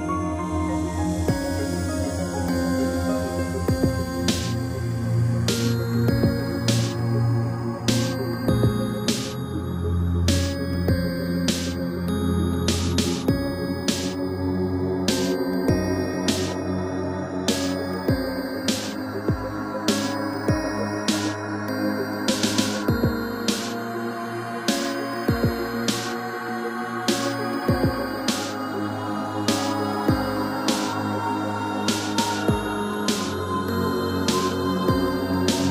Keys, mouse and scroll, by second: 2.7 click, 5.4 click, 8.0 click, 9.0 scroll down 1, 9.3 middle click, 9.9 scroll up 2, 11.1 click, 12.6 g, 13.8 click, 13.9 click, 14.1 middle click, 15.2 shift+middle click, 15.6 middle click, 16.4 shift+middle click, 18.5 click, 19.9 1, 20.7 g, 21.9 click, 22.2 click, 22.8 g, 24.0 click, 24.5 click, 25.5 shift+middle click, 28.1 click, 31.2 7, 32.1 r, 33.2 click, 33.5 middle click, 34.7 shift+middle click, 35.2-35.7 scroll up 3.